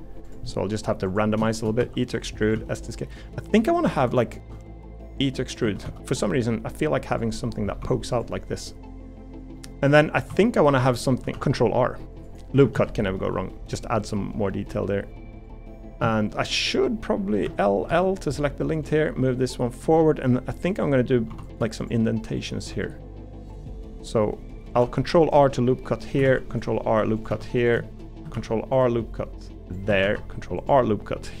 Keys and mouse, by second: 0.4 middle click, 1.8 e, 2.5 s, 4.5 e, 5.6 s, 7.3 middle click, 7.8 2, 9.6 middle click, 10.1 3, 10.3 3, 10.7 middle click, 11.3 ctrl+r, 12.7 alt+s, 15.7 middle click, 16.1 shift+middle click, 17.9 l, 20.0 middle click, 22.9 middle click, 24.7 ctrl+r, 26.3 ctrl+r, 27.3 3, 28.3 ctrl+r.